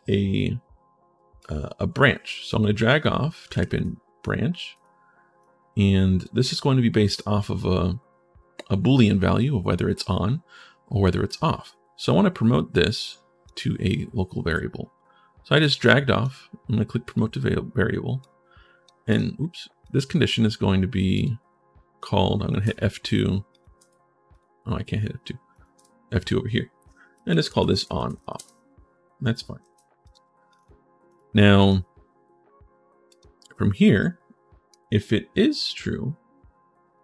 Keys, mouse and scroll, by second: 1.2-2.6 drag, 3.1-3.8 typing, 4.5 click, 5.2 click, 5.8 right click, 11.2 right click, 12.8 click, 15.3 click, 15.6 click, 16.8 click, 18.0 click, 18.9 click, 19.6 click, 20.9 click, 23.3 click, 24.1 click, 25.3 click, 29.4 ctrl+shift+s, 29.8 click, 30.3 click, 30.9 click, 31.4 click, 32.8 click, 33.8 right click.